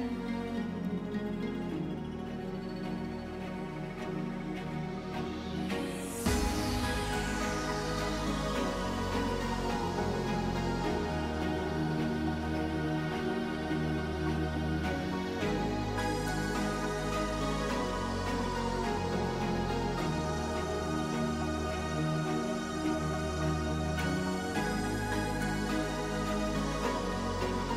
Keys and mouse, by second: 2.5 click, 5.9 click, 7.9 click, 14.8 click, 21.5 click, 25.9 click.